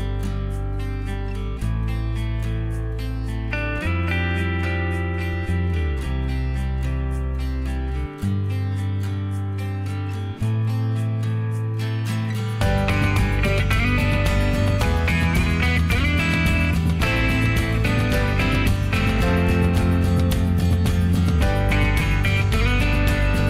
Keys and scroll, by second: 0.7 m, 3.7-4.7 typing, 4.7 Escape, 17.9 ctrl+a, 18.8 ctrl+h, 20.8 q, 23.1 m.